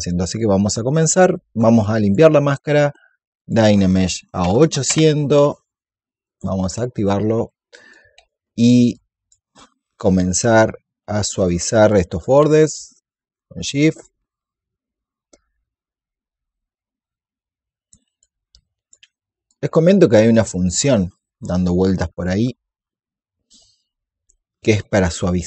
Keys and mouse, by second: 1.8 ctrl+click, 3.3 click, 4.2 KP_8, 6.1 click, 11.8 alt+click, 12.6 shift+click, 18.1 click, 19.4 shift+click.